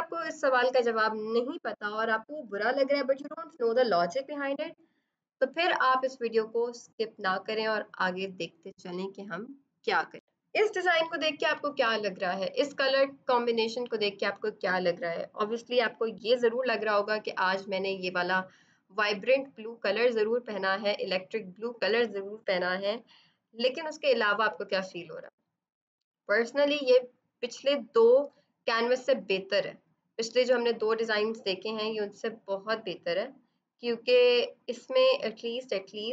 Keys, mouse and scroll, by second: 9.7 F7.